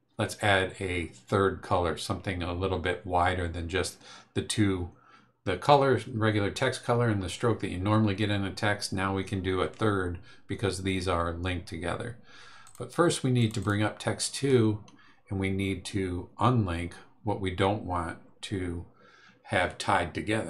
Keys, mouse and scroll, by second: 6.9-7.4 scroll down 3, 12.6 click, 13.4 click.